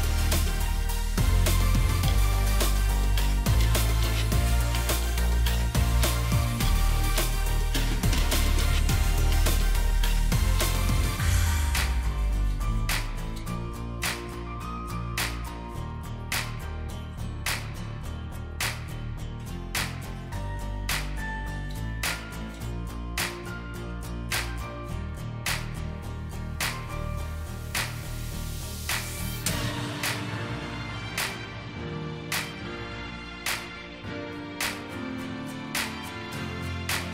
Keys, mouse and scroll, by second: 9.2 Right, 9.4 Right, 9.7 Right, 10.1 Right, 10.7 Right, 11.0 Right, 11.8 Right, 14.5 Left, 14.8 Left, 15.1 Left, 15.3 Left, 15.7 Left, 16.3 Left, 16.5 Left, 17.1 Left, 18.7 double click, 20.2 shift+click, 27.5 double click, 28.6-28.9 scroll down 1, 31.5-33.8 alt+scroll down 1.